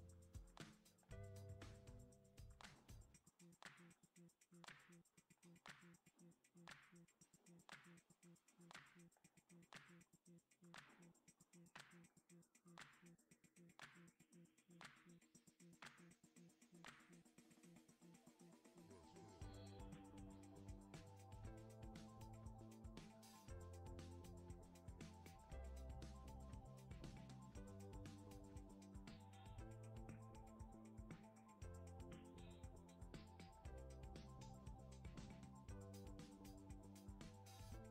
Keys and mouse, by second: 4.4-37.9 shift+middle drag, 4.9 KP_Decimal.